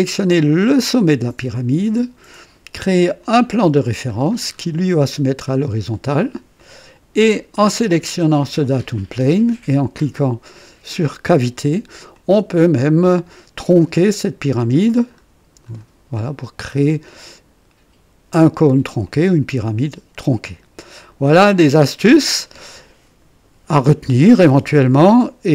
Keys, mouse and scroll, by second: 0.6 click, 3.2 click, 4.1-4.7 scroll down 2, 5.4-6.2 drag, 6.5 click, 8.1 click, 11.2 click, 12.1 click, 13.0 right click, 14.5-14.8 scroll up 2, 15.1-15.9 scroll up 4, 16.4 scroll down 2, 17.2-18.8 drag, 19.0-20.4 drag, 20.9 click.